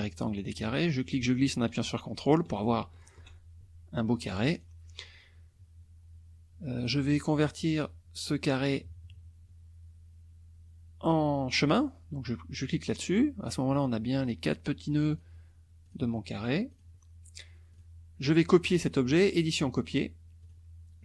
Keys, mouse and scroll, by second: 1.0-3.2 ctrl+drag, 4.5 click, 6.8 click, 12.7 click, 14.2 click, 15.1 click, 15.9 click, 16.7 click, 17.7 click, 19.4 click, 20.4 click.